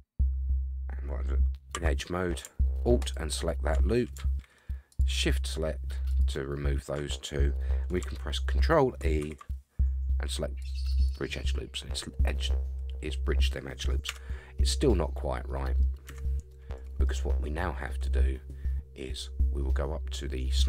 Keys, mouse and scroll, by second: 1.7 2, 3.0 alt+click, 4.9 shift+click, 6.1 shift+click, 9.2 ctrl+e, 14.1 Tab, 14.6-15.8 middle drag, 15.9 scroll up 3, 16.1 Tab, 16.5 middle click.